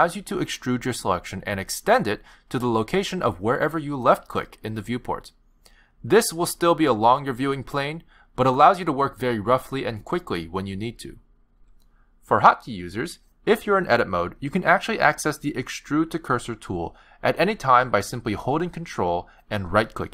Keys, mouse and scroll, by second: 4.0 click, 5.1 click, 5.9 click, 6.6 click, 7.3 click, 8.0 click, 11.4 ctrl+z, 11.6 ctrl+z, 11.9 ctrl+z, 12.1 ctrl+z, 12.3 ctrl+z, 12.6 ctrl+z, 14.2 click, 18.0 middle click, 20.0 ctrl+right click.